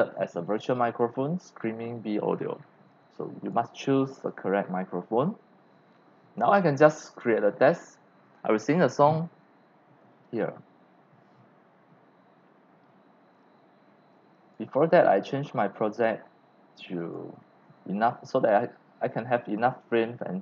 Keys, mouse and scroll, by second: 3.4 click, 14.1 click, 15.2 click, 15.9 click, 17.0 click, 19.6 0, 19.7 scroll.